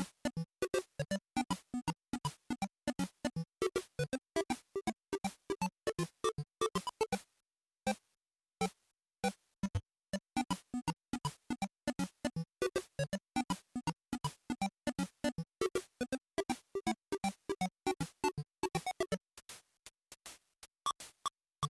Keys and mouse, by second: 3.6-5.0 drag, 6.7 click, 11.4-11.9 drag, 12.2 ctrl+shift+click, 14.1-19.1 drag, 19.8-21.7 drag.